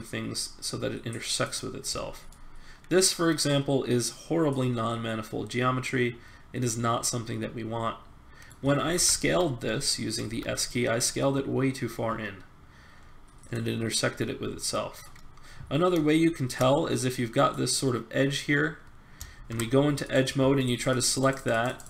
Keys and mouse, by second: 2.0 middle click, 2.4 middle click, 3.9 middle click, 8.8 ctrl+z, 10.2 s, 14.5 middle click, 14.7 middle click, 15.3 middle click, 17.5-18.8 middle drag, 19.3 ctrl+Tab.